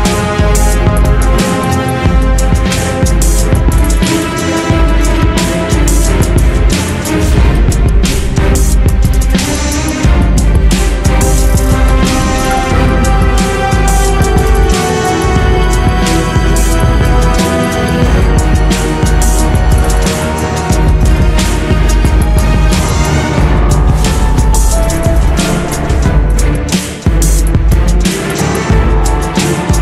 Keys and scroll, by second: 1.6 Escape, 10.8 Escape.